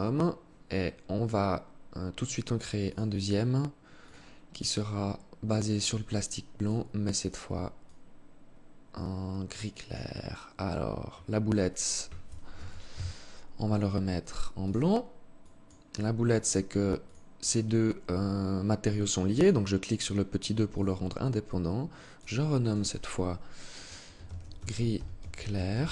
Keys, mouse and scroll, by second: 2.0 click, 3.2 click, 5.9 click, 11.9 ctrl+z, 13.9 click, 16.3 click, 16.7 click, 18.7 click, 20.1 click.